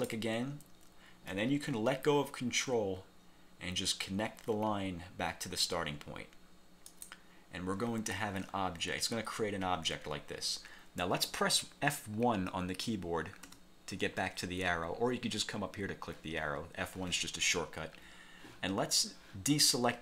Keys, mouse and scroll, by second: 0.0 ctrl+click, 7.0 click, 13.6 F1.